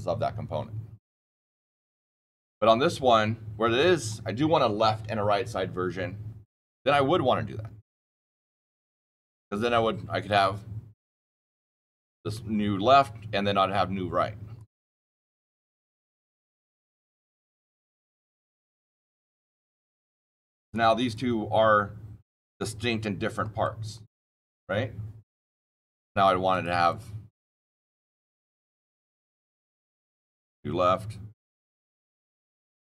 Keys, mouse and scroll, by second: 2.5-6.2 drag, 7.9 ctrl+click, 8.2 ctrl+z, 8.8 ctrl+z, 14.5 click, 15.5 click, 16.8 click, 17.5 click, 17.8 shift+click, 18.1 shift+click, 18.3 shift+click, 18.9 click, 20.1 click, 20.6 click, 23.6-24.1 shift+click, 24.2-25.2 shift+middle click, 26.4 click, 26.8 click, 27.6 click, 28.2 click, 29.4-30.5 typing, 32.3 click.